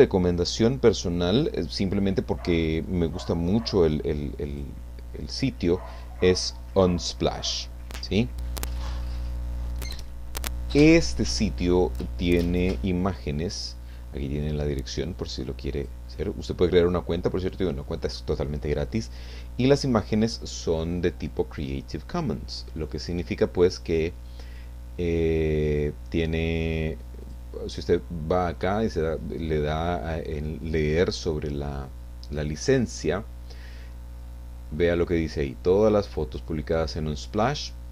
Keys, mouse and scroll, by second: 4.5 click, 14.9 click, 16.4 click, 27.2 click, 35.0-37.9 drag.